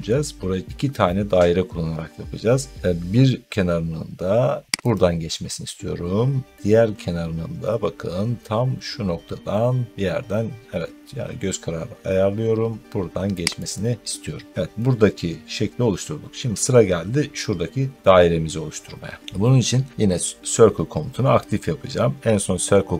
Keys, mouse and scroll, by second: 4.8-9.9 drag, 13.6-17.9 drag.